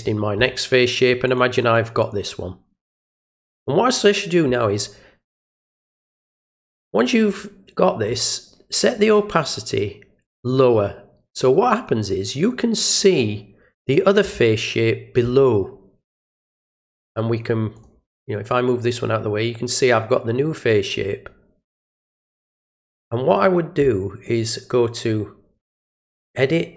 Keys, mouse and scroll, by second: 1.2 click, 2.0 click, 7.2 click, 9.0 click, 9.7-10.8 drag, 11.4 click, 12.9 click, 17.7 click, 18.4-23.2 drag, 24.2 click.